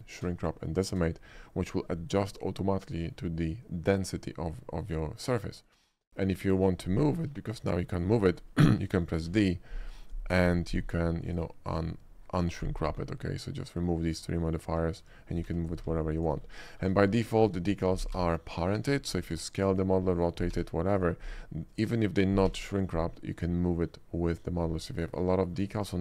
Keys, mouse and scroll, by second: 1.6 middle click, 2.4 shift+middle click, 3.0 shift+middle click, 4.6-6.0 shift+middle drag, 6.5 shift+middle click, 7.2 g, 8.4 right click, 8.7 shift+middle click, 9.1 shift+middle click, 9.3 f, 10.5 d, 11.4 click, 11.7 middle drag, 13.6 middle click, 15.0 shift+click, 15.5 g, 16.5 middle click, 16.7 middle drag, 17.1 middle click, 17.4 click, 18.2 g, 18.8 right click, 19.3 s, 19.7 right click, 20.5 r, 21.7 click, 22.5 g, 22.9 right click, 24.7 middle click, 25.0 click, 25.4 middle click, 25.8 shift+middle click.